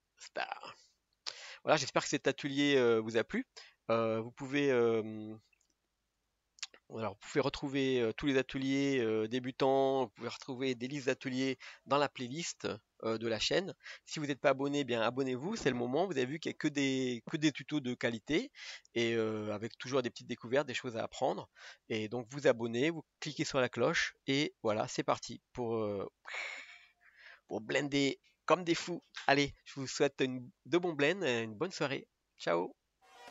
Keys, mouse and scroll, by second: 0.0 ctrl+space, 0.0 middle click, 0.1-1.3 scroll up 1, 1.3 scroll up 1, 1.3-33.3 shift+middle drag.